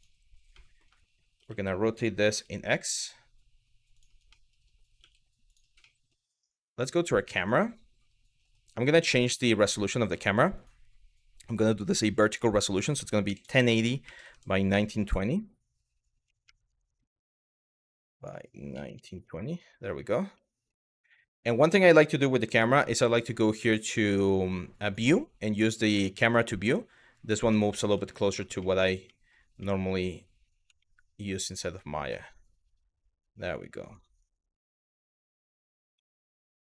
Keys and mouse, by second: 0.3 middle drag, 1.0 r, 4.0 middle click, 4.7 g, 5.2 click, 5.6 middle click, 7.0 click, 10.2 click, 12.2-16.8 drag, 14.9 BackSpace, 15.0 BackSpace, 16.1 KP_1, 17.8-19.1 drag, 20.1 middle click, 22.2 n, 30.5 shift+middle click, 31.7 shift+middle click, 33.5 click, 35.6 n.